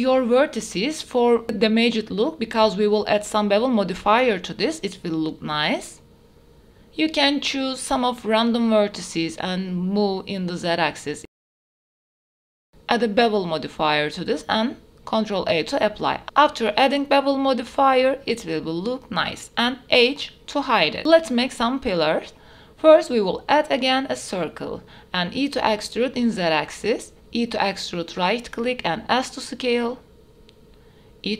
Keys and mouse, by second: 0.3 g, 0.7 z, 2.2 click, 3.5 g, 4.9 z, 5.3 click, 5.8 shift+click, 6.6 click, 7.0 g, 8.9 click, 9.3 Tab, 9.9 click, 10.8 Tab, 11.2 click, 11.3 g, 11.6 click, 11.9 click, 12.1 g, 12.4 click, 12.6 click, 12.6 g, 12.7 Tab, 13.0-14.1 drag, 15.5 ctrl+a, 16.1 Tab, 16.8 middle click, 17.7 Tab, 18.5 shift+middle drag, 19.5 h, 20.1 shift+a, 22.2 shift+middle drag, 23.1 Tab, 23.2 shift+middle click, 23.8 1, 24.4 e, 24.7 z, 26.7 e, 27.4 s, 29.6 click, 30.0 e, 30.3 z.